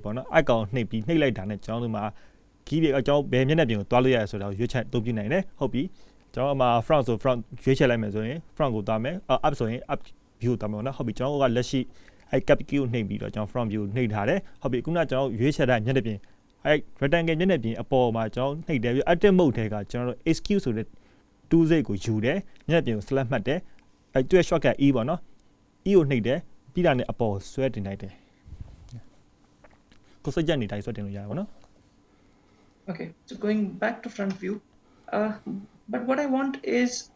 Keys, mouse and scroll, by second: 30.3 middle click.